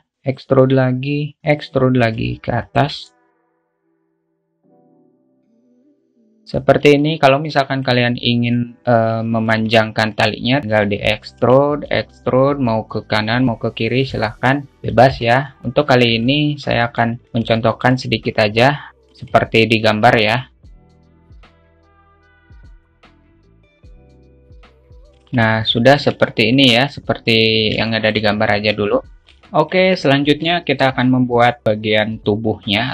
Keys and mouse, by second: 0.1 e, 1.5 e, 3.3 alt+shift+middle click, 3.7 a, 3.9 click, 4.5 `, 5.3 click, 5.9 ctrl+z, 6.1 click, 6.5 Tab, 7.3-8.2 alt+middle drag, 10.6 alt+z, 10.6 Tab, 10.8 shift+middle click, 11.8 e, 14.7 alt+z, 15.3 ctrl+z, 16.2 ctrl+r, 17.3 Tab, 17.9 alt+shift+middle click, 18.3-18.9 alt+middle drag, 19.0 `, 20.3 `, 21.6 g, 21.6 alt+z, 21.8 click, 21.8 a, 21.9 a, 22.2 g, 22.7 alt+shift+middle click, 23.2 shift+middle click, 23.2 a, 23.3 click, 23.6 g, 24.0 click, 24.5 a, 24.9 middle click, 25.0 Tab, 25.0 alt+z, 25.4 `, 26.6-26.9 alt+shift+middle drag, 28.2 alt+shift+middle click, 28.4 `, 30.9-31.2 alt+shift+middle drag.